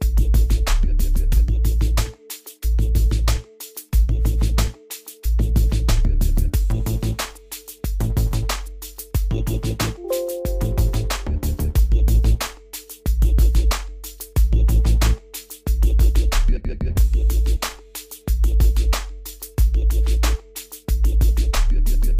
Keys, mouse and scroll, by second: 4.8 click, 9.6 click, 12.9 click.